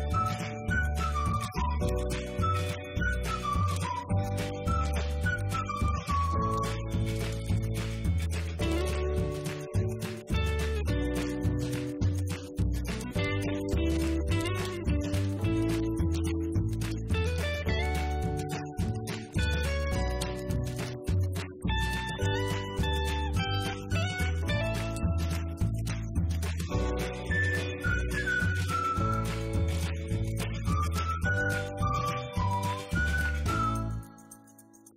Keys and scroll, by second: 2.1-5.2 typing, 5.2 Up, 5.3 Right, 7.2-8.5 typing, 8.7 Return, 8.9 Up, 9.1 Right, 10.7 Left, 13.2 Right, 13.6-14.7 typing, 14.9 Right, 16.0-17.1 typing, 17.4 Return, 17.6 Up, 17.7 Right, 19.1-21.0 typing, 21.6 Left, 21.7 Up.